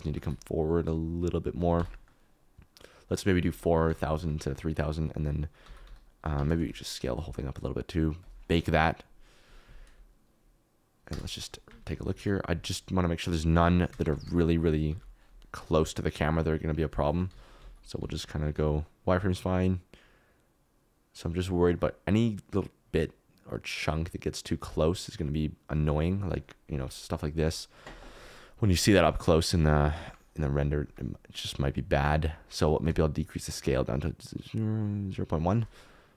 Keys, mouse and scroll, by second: 0.0 g, 0.2 y, 1.8 Tab, 2.0 middle click, 5.6 g, 6.6 Escape, 6.6 s, 7.2-9.4 drag, 11.1 KP_0, 11.6 space, 12.1 alt+z, 14.1 space, 15.1 z, 16.5 click, 17.3 z, 18.0 alt+z, 19.4-21.5 drag, 21.8-26.0 drag, 26.6 z, 31.2 click, 33.1-35.5 shift+middle drag.